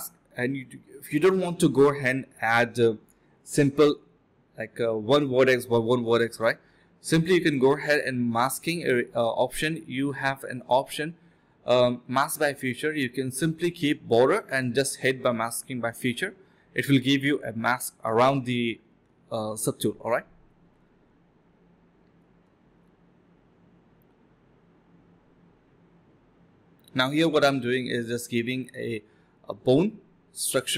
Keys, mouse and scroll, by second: 1.1 ctrl+alt+click, 1.4 ctrl+shift+click, 3.5 shift+click, 3.5 shift+double click, 3.6 shift+click, 4.9 alt+click, 5.5 f, 5.7 alt+click, 6.2 alt+click, 6.5 alt+double click, 7.1 alt+click, 8.4 alt+click, 9.5-10.3 ctrl+z, 10.5 ctrl+shift+z, 10.6 ctrl+shift+z, 11.3 ctrl+shift+click, 13.4 ctrl+shift+click, 14.4 typing, 15.2 ctrl+d, 15.3 ctrl+d, 17.7 alt+click, 20.4 alt+click, 20.7 alt+click, 21.6 ctrl+z, 21.7 ctrl+z, 23.6 alt+click, 24.0 ctrl+shift+click, 24.4 ctrl+shift+q, 24.8 alt+click, 25.0 alt+click, 26.2 ctrl+b, 26.6 double click, 26.7-28.1 typing, 28.0 ctrl+shift+click, 30.0 alt+click, 30.2 alt+click.